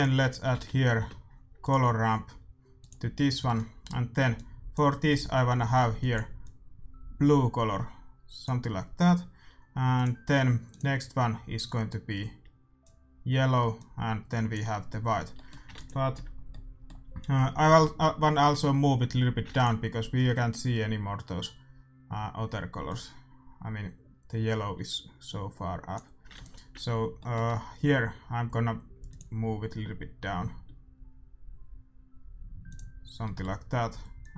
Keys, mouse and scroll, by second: 3.4-5.1 middle drag, 4.3-8.4 drag, 9.9-12.4 drag, 13.7-15.5 drag, 15.3-18.9 middle drag, 15.7 ctrl+s, 19.4 ctrl+s, 22.8-24.8 drag, 26.3-28.2 drag, 27.1-30.6 middle drag, 29.0-31.0 drag, 32.6-34.3 drag, 33.2-34.3 middle drag.